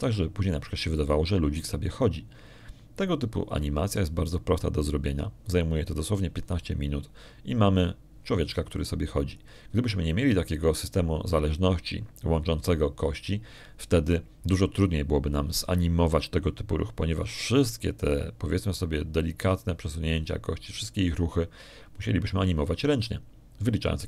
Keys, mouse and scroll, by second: 0.9 click, 1.8 alt+a, 2.8 click.